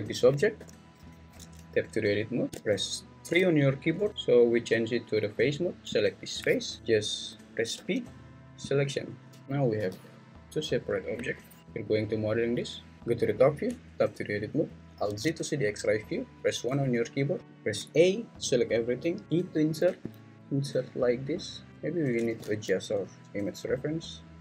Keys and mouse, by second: 0.6 g, 1.1 Escape, 1.5 Tab, 3.3 3, 5.9 click, 7.8 p, 9.4 Tab, 9.8 g, 11.2 Escape, 11.6 g, 13.0 Tab, 13.0 `, 13.6 Tab, 15.1 alt+z, 16.7 1, 17.4 a, 19.2 i, 21.7 Tab, 22.4 alt+z, 23.6 s.